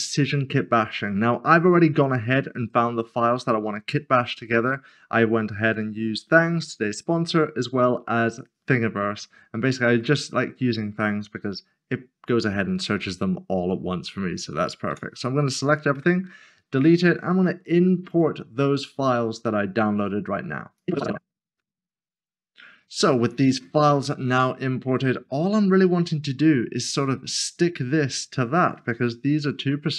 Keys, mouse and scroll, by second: 0.0 scroll down 1, 1.0 middle click, 10.0 middle click, 11.0 scroll up 1, 14.9 a, 18.0 a, 20.8 click, 21.2-21.6 typing, 21.3 scroll down 1, 21.7 double click, 21.8 click, 22.3 ctrl+click, 22.7-23.3 scroll down 1, 24.3 middle click, 25.0 shift+middle click, 26.0 scroll down 1, 28.8 scroll down 1, 28.9-29.9 scroll up 1.